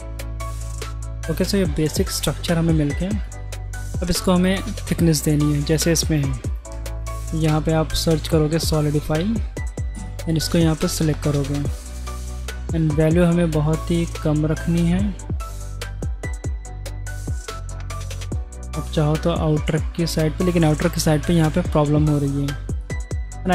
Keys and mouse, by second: 0.2-0.7 drag, 0.7 middle click, 1.0 Tab, 2.1 middle click, 3.3-3.7 drag, 4.3 middle click, 6.5 click, 6.6-10.0 right drag, 11.0 middle click, 12.8 shift+middle click, 16.6 middle click, 17.4 middle click, 18.8 shift+click, 19.2-20.9 shift+middle drag, 21.9 ctrl+z, 23.0 Tab, 23.4 middle drag.